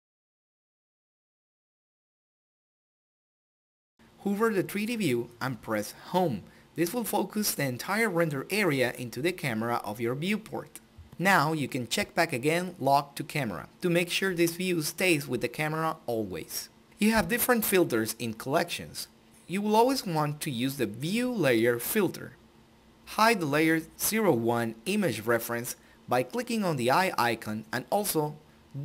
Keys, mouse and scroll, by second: 1.2 n, 2.8 click, 6.0 Home, 11.1 click, 13.0-14.4 drag, 15.5 click, 22.5-25.8 drag, 28.1 click.